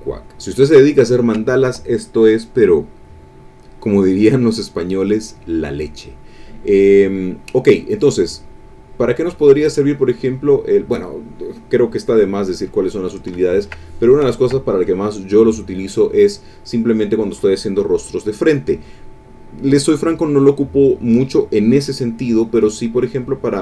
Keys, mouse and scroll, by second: 0.8 ctrl+middle click, 4.0 middle click, 5.1 middle click, 5.8 middle click, 6.2 click, 6.6 click, 6.8 middle click, 8.3 click, 8.9 click, 9.9 click, 11.0-13.0 drag, 13.4 ctrl+click, 14.0 ctrl+middle click, 14.0 ctrl+click, 14.9 click.